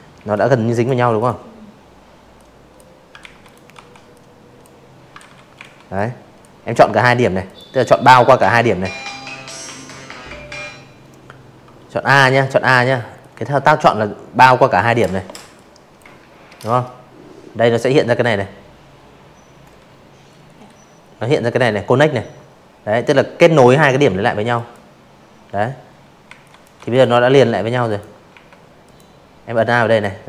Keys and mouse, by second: 0.2 ctrl+z, 0.4 click, 0.7 v, 1.1 click, 2.2 ctrl+z, 2.5 a, 2.9 click, 4.4 click, 4.8 click, 9.0 a, 10.1-11.9 drag, 12.5 click, 21.5 click, 23.2 z, 23.4 click, 23.7 v, 23.9 click, 24.8 click, 25.3 a, 25.8 click, 26.5 click, 27.6 ctrl+z, 29.6-30.2 typing, 29.7 click, 30.1 click.